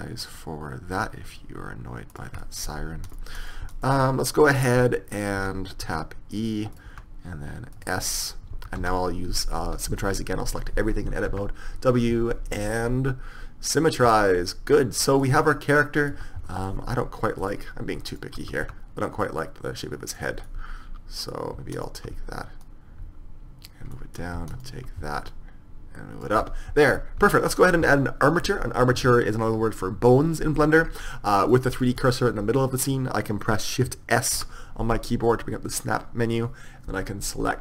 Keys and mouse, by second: 2.2-3.2 drag, 3.2 middle click, 3.9 click, 5.9 e, 7.0 s, 8.6 a, 8.9 a, 11.4 w, 14.2 middle click, 15.1 click, 15.2 middle click, 15.3 click, 15.4 Tab, 16.2 Tab, 18.7 s, 20.5 click, 22.2 s, 22.7-23.8 drag, 24.0 click, 25.4-26.5 middle drag, 26.5 Tab, 27.3 KP_1, 31.6-33.8 drag, 34.4 shift+s.